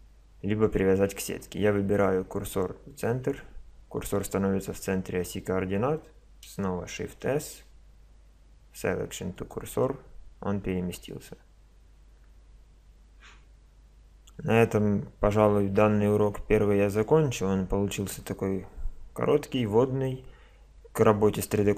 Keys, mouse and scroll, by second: 6.8 shift+s.